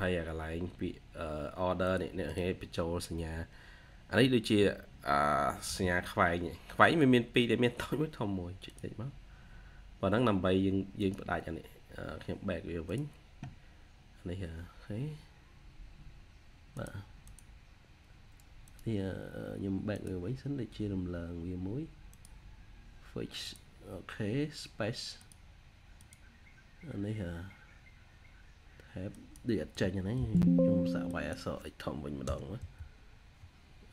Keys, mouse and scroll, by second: 2.1 double click, 5.5 typing, 30.1 typing, 31.9-33.0 typing.